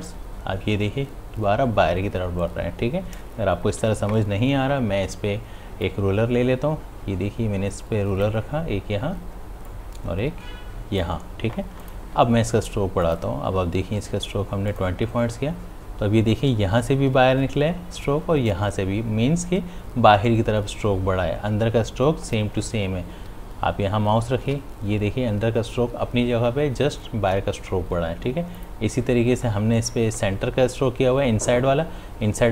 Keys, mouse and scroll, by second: 24.7 ctrl+z.